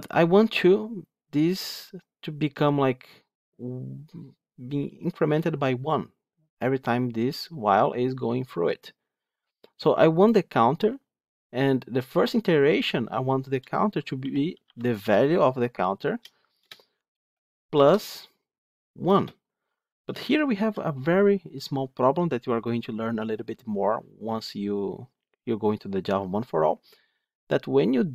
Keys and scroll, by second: 16.5 Return.